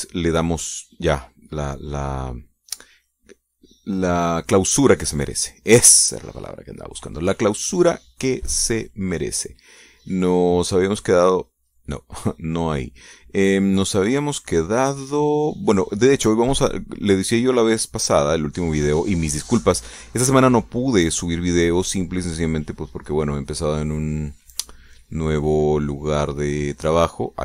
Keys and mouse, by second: 1.6-2.8 drag, 2.9 click, 4.3 click, 6.3-9.5 drag, 10.4 click, 10.9 click, 12.0 click, 14.4 click, 15.6-16.9 drag, 22.6 click, 25.1 click, 25.5 click, 26.4 click, 26.9 click.